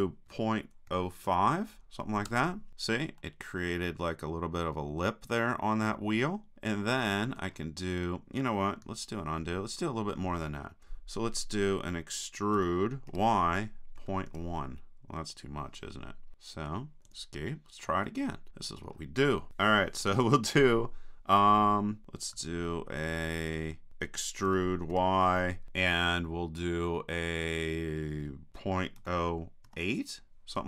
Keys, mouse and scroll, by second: 3.2-5.3 middle drag, 9.3 super+z, 12.7 e, 18.1 click, 18.4 middle click, 18.5-22.4 drag, 23.5 super+z, 24.5 e.